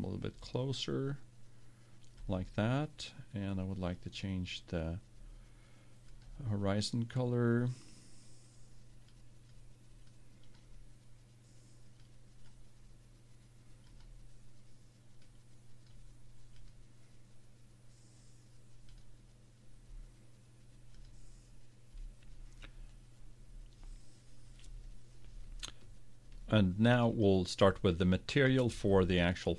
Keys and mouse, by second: 4.0-7.9 drag, 19.0-20.7 drag, 21.1-22.8 drag, 27.2-28.9 right drag.